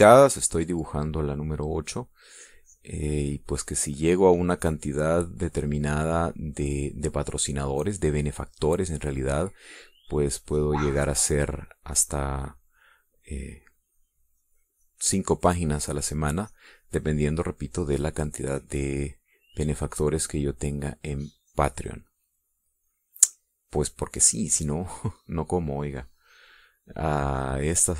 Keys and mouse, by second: 3.5-6.0 drag, 6.6-9.0 drag, 9.4-12.6 drag, 13.5 click, 14.0-17.2 drag, 17.6-19.2 drag, 19.7 click, 20.7 click, 22.0-23.2 drag, 24.3 middle click, 25.3 middle click.